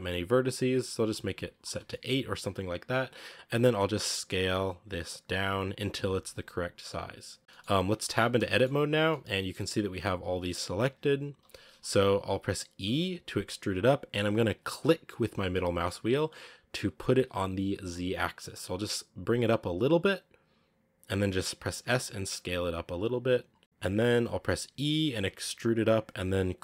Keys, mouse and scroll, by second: 0.9 click, 1.7-2.1 shift+middle drag, 2.1-2.6 scroll up 2, 3.8 s, 7.4 shift+middle click, 8.0 Tab, 8.3 shift+middle click, 8.5-8.9 scroll up 2, 8.9-11.2 middle drag, 11.2 KP_1, 12.7 e, 21.6 s, 23.6 scroll up 1, 25.0 e.